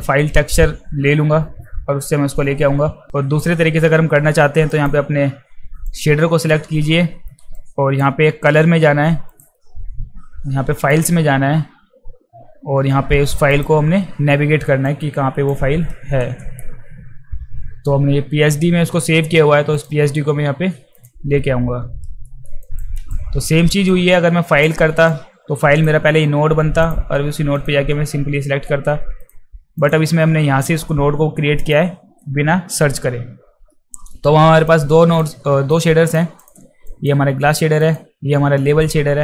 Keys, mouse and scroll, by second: 4.7 drag, 5.9 click, 7.6-8.0 drag, 9.3 click, 10.9 click, 13.6 click, 14.8 click, 16.0 ctrl+v, 19.8 click, 21.0 click, 22.2 alt+middle click, 22.6 alt+right click, 22.9 alt+right click, 23.9-24.6 drag, 25.1-25.8 drag, 26.8 click, 27.6 click, 29.2 click, 29.8 click, 31.6 click, 34.7-35.2 drag, 35.7-36.1 drag, 36.4 click, 36.9 click, 37.8 drag.